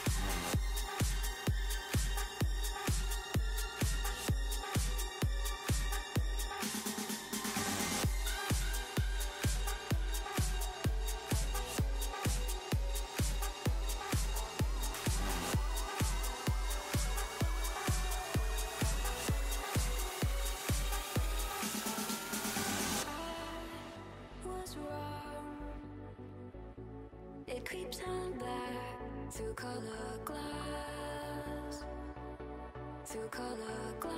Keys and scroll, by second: 26.1 s, 26.7 s.